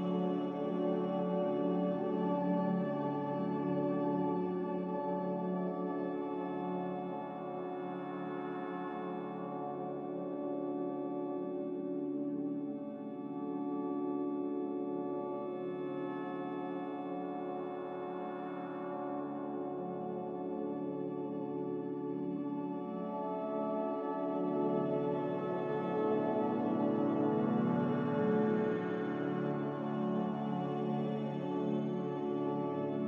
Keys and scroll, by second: 1.9-2.7 typing, 13.5-14.3 typing, 21.8-22.5 typing, 24.7-25.4 typing, 32.7 ctrl+z.